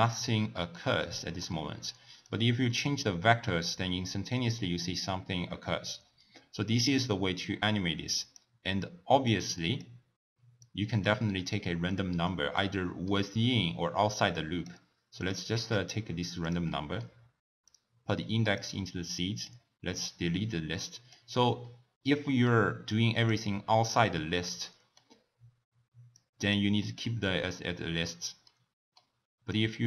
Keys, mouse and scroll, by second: 0.3-2.2 middle drag, 2.2-5.3 drag, 9.3 click, 10.6 drag, 11.4-11.9 middle drag, 11.9 click, 12.5-14.3 middle drag, 14.3 click, 15.2 click, 15.7 shift+d, 16.7-17.7 middle drag, 17.7 drag, 19.5 click, 20.1 click, 21.6-22.9 middle drag, 22.9 drag, 24.5-26.1 middle drag, 26.1 click, 26.8-29.5 middle drag, 29.5-29.8 drag.